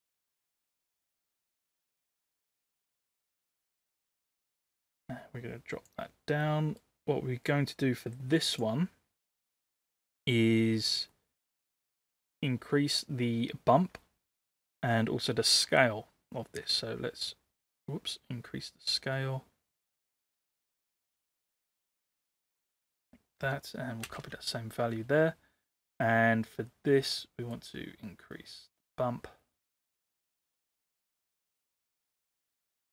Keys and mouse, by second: 1.0 click, 4.7-5.8 drag, 6.6 middle click, 8.0 click, 9.4 click, 11.3 middle click, 16.9-20.8 drag, 21.4-22.5 drag, 23.4 ctrl+c, 24.1 ctrl+v, 27.7-30.7 drag, 31.6-32.9 middle drag.